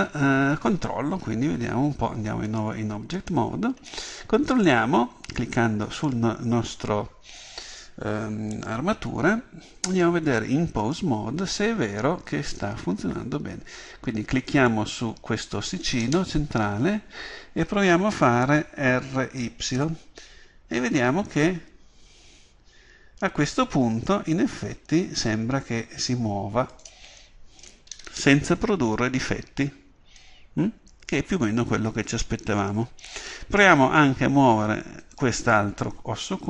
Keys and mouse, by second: 3.4 click, 4.3-6.0 middle drag, 6.0 right click, 10.0 click, 11.7-14.6 drag, 14.6 right click, 16.3-19.2 middle drag, 26.9-35.1 drag, 35.1 right click.